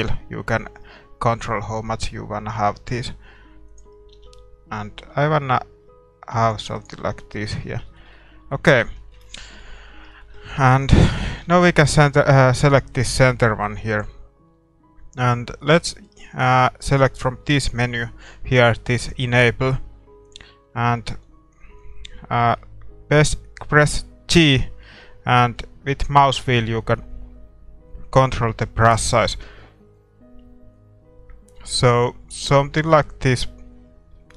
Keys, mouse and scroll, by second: 6.7-8.5 right drag, 7.0-7.3 scroll down 1, 7.2 a, 7.3-24.4 middle drag, 10.8-12.6 right drag, 24.4 g.